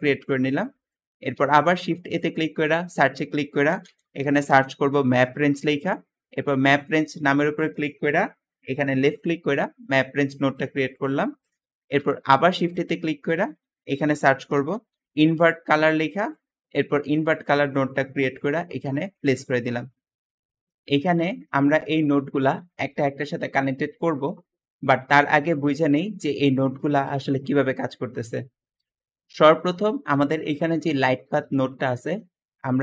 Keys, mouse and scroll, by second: 0.0 Escape, 0.0 Escape, 1.2 shift+a, 3.5-4.5 typing, 11.8 shift+a, 14.1-14.9 typing, 18.7 click, 20.2 Escape, 20.5 middle click, 21.0 scroll down 2, 21.3-22.6 middle drag, 21.3 scroll up 2, 21.5-22.0 scroll down 2, 22.0-22.6 scroll up 2, 22.8-23.6 middle drag, 22.8-23.6 scroll down 2, 24.0 middle click, 24.6 middle click, 25.0-26.1 scroll up 5, 26.1 middle click, 26.1-26.9 scroll down 2, 27.6 middle click, 28.0 middle click, 28.0-28.3 scroll down 2, 29.8 g.